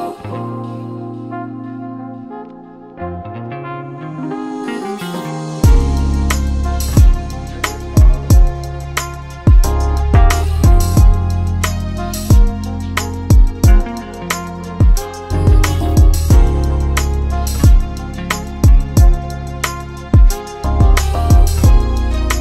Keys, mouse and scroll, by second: 0.2-0.8 shift+click, 0.5 shift+click, 0.6 shift+click, 1.1 click, 2.6 shift+click, 2.8 scroll down 2, 3.0-3.4 middle drag, 3.4 KP_3, 3.6-4.0 scroll up 1, 4.0 g, 5.3-5.9 scroll down 2, 5.4 middle drag, 5.9-6.4 middle drag, 6.4 scroll down 1, 6.5-6.9 middle drag, 6.9 KP_7, 7.4 scroll down 1, 7.6-8.2 middle drag, 8.2-8.7 scroll up 1, 8.7 scroll down 1, 8.7 middle drag, 9.0 scroll up 1, 9.2 scroll down 2, 9.5-10.0 middle drag, 10.0 KP_3, 10.1-10.6 scroll up 9, 10.6-11.0 middle drag, 11.8 KP_3, 12.0-12.4 scroll up 3, 12.5 g, 13.6-14.3 middle drag, 15.7-16.9 drag, 17.6-18.2 scroll down 4, 19.7-21.2 drag, 21.3-21.7 scroll down 5, 21.5 middle click, 21.7-22.4 scroll up 3, 21.8 middle click.